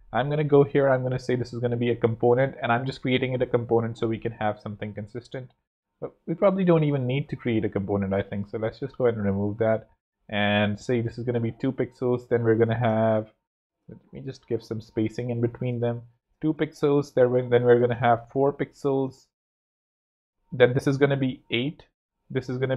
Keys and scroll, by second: 0.5 alt+super+Home, 1.6 alt+super+l, 1.9 alt+super+l, 2.2 super+Left, 3.1 Left, 4.8 ⟲, 7.2 super+z, 11.3 super+d, 12.6 shift+super+Home, 13.7-14.5 typing, 17.9 super+4, 18.0-18.8 typing, 19.0 shift+Return, 19.5 shift+super+d, 20.1 super+d, 21.9 super+d.